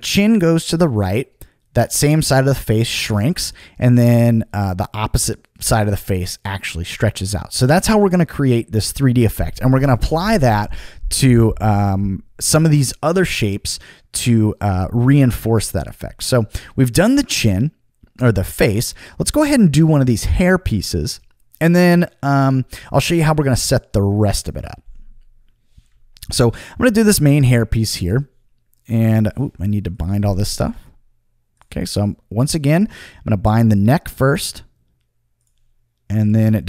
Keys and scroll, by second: 7.8 super+z, 27.2 Return, 27.8 Return, 30.6 Return.